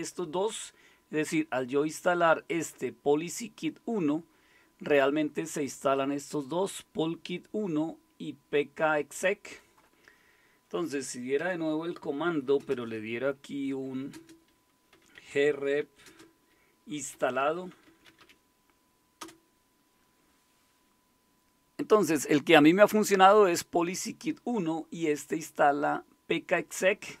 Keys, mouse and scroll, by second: 0.3 click, 2.5-5.0 drag, 6.7-9.2 drag, 9.4 click, 11.4 Home, 12.6 typing, 13.7-19.2 typing.